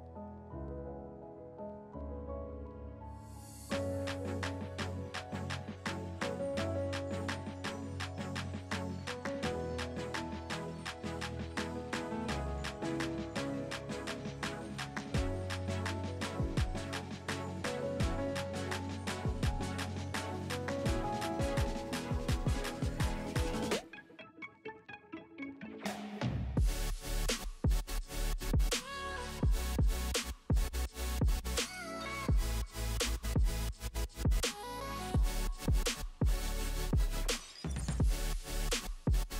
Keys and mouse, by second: 2.5 middle click, 2.5 right click, 6.4 middle click, 6.4 right click, 10.7 middle click, 10.7 right click, 13.3 middle click, 13.4-16.1 drag, 16.1 middle click, 16.2-23.9 drag, 21.0 middle click, 21.0 right click, 23.9 middle click, 24.1-30.7 drag, 30.7 middle click, 30.8-33.1 drag, 33.1 middle click, 33.2-38.9 drag, 38.9 middle click, 39.0-39.3 drag.